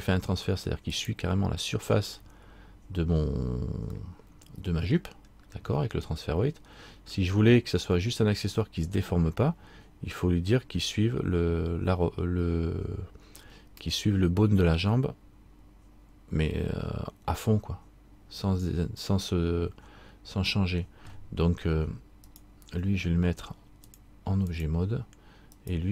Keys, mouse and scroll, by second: 2.3 middle click, 4.1 middle click, 5.4 scroll up 1, 6.1 scroll up 2, 6.3 middle click, 22.5 right click, 24.0 click, 25.7 right click.